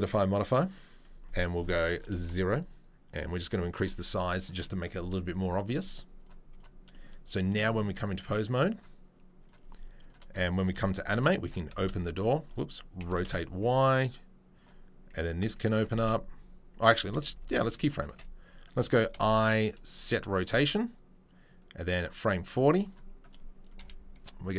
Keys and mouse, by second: 0.0-1.3 drag, 1.3 middle click, 1.6-6.2 drag, 6.2 middle click, 6.5 click, 6.6-8.7 middle drag, 8.7-10.1 drag, 10.1-14.5 shift+middle drag, 11.4 r, 13.0 r, 14.5 click, 15.7 e, 15.9 y, 17.3 ctrl+z, 17.5 ctrl+z, 18.1 a, 19.1 i, 20.7-21.9 drag, 22.9-24.5 middle drag, 23.7 KP_3, 24.2 KP_1.